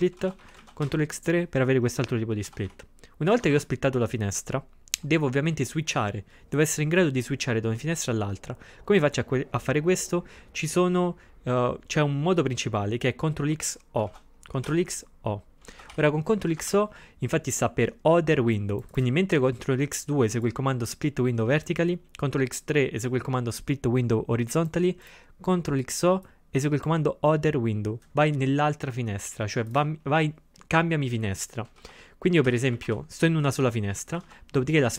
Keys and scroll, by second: 0.2 ctrl+x, 0.5 0, 0.6 ctrl+x, 0.8 3, 2.5 ctrl+x, 2.7 0, 3.4 ctrl+x, 3.5 2, 14.1 ctrl+x, 14.7 o, 15.7 ctrl+x, 15.9 o, 16.4 c, 31.8 ctrl+x, 32.5 o, 32.8 ctrl+x, 32.9 0, 34.3 ctrl+x, 34.8 2.